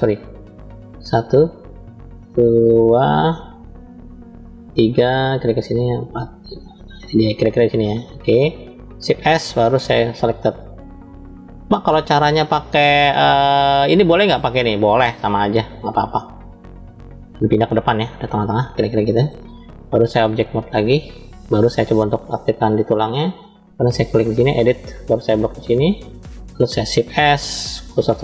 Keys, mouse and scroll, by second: 0.0 click, 0.8 click, 2.4 middle click, 3.7 shift+click, 5.1 shift+click, 6.1 shift+click, 7.0 shift+click, 7.8 shift+click, 8.9 shift+s, 17.7-19.2 middle drag, 20.1-20.9 drag, 22.1 click, 23.6-24.5 drag, 25.6 click, 27.0 shift+s.